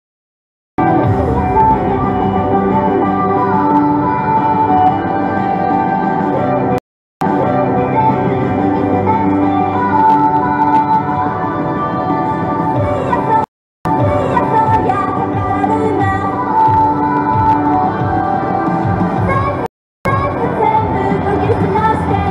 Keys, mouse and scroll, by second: 0.5 Return, 0.8 space, 6.8 right click, 7.1 Return, 7.2 space, 13.5 right click, 13.7 Return, 13.9 space, 19.7 right click, 19.9 Return, 20.1 space.